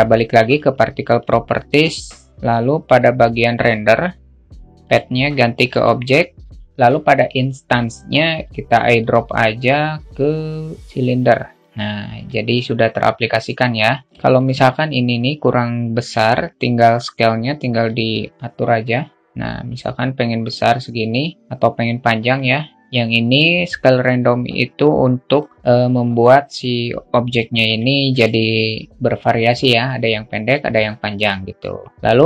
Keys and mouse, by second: 3.0-5.4 drag, 8.5-10.2 drag, 12.0 alt+middle click, 20.8-25.2 drag, 26.8 alt+middle click.